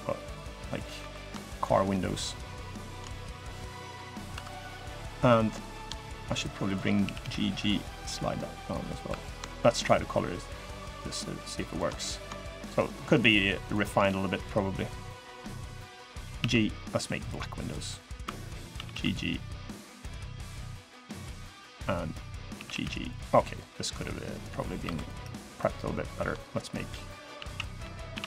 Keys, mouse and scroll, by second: 0.7 3, 1.0 click, 1.3 shift+click, 1.8 click, 2.9 middle click, 3.5 middle click, 4.1 2, 4.4 click, 5.0 click, 5.8 shift+click, 6.1 shift+click, 6.4 shift+click, 6.8 g, 8.8 3, 9.0 click, 9.5 click, 11.2 click, 11.4 shift+click, 11.7 middle click, 12.7 shift+click, 13.0 shift+click, 13.4 shift+click, 13.7 middle click, 14.2 middle click, 16.1 g, 17.3 click, 17.7 middle click, 18.0 2, 18.2 click, 18.5 g, 19.9 click, 20.4 click, 21.5 click, 22.0 click, 22.3 g, 24.6 3, 24.7 click, 25.5 shift+click, 26.9 a, 27.5 b.